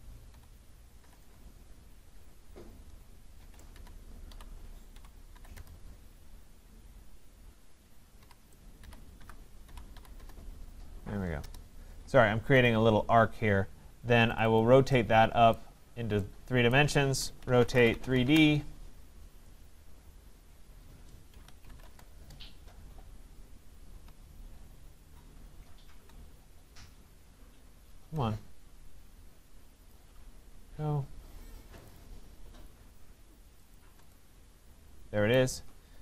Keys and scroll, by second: 1.2 Return, 18.2 Return.